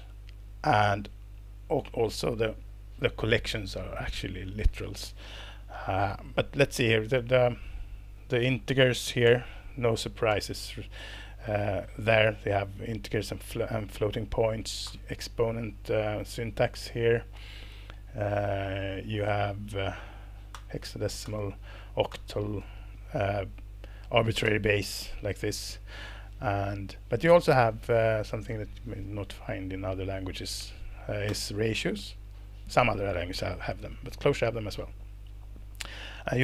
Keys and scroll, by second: 9.2 alt+Return, 9.8 Down, 10.3 alt+Return, 13.9 Down, 14.8 alt+Return, 17.4 Down, 18.6 Down, 18.7 Page_Down, 19.6 Page_Down, 20.5 alt+Return, 20.9 Down, 21.2 alt+Return, 21.7 Down, 22.1 alt+Return, 22.6 Escape, 24.4 alt+Return, 25.6 Escape, 27.9 Up, 28.1 Up, 28.3 Up, 28.6 Up, 31.3 alt+Return, 33.9 Escape, 36.0 Up.